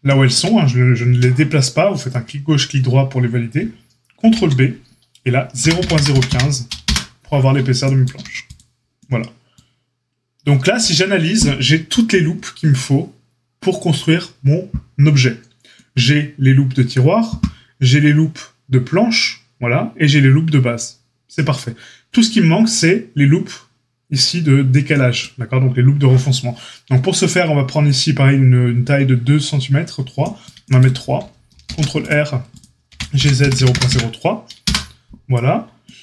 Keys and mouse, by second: 4.1 ctrl+b, 8.1 a, 31.5 ctrl+r, 32.8 g.